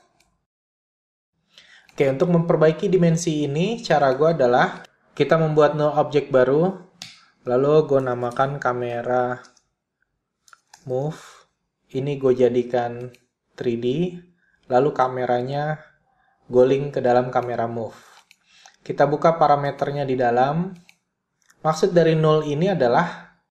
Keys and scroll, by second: 8.5 Return, 9.5-10.4 typing, 11.5-13.1 typing.